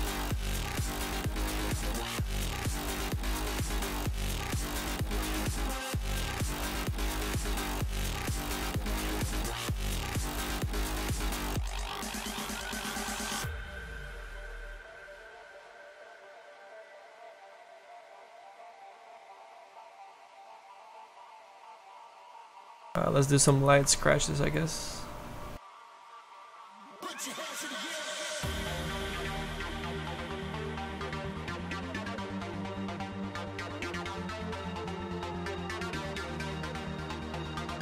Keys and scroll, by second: 1.9 s, 7.4 s, 19.2 s, 26.4 s.